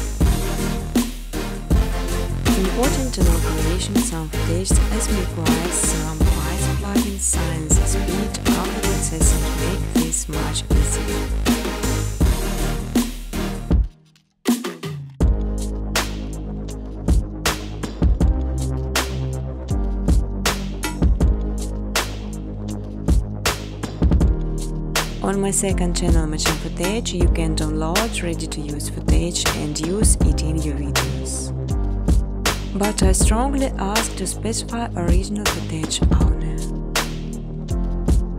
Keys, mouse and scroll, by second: 0.8 Tab, 2.4-3.6 typing, 4.7 Tab, 4.8-5.5 typing, 7.6 click, 8.6 click, 8.6 typing, 8.7 click, 11.6 click, 12.6 click, 13.3 click, 14.5-18.8 typing, 17.0 Tab, 20.1-21.9 typing, 24.1-24.9 typing, 24.2 click, 24.3 click, 26.9 click, 27.9 click, 29.6-31.8 typing, 32.1 Tab, 33.3-34.0 typing, 35.2-35.9 typing.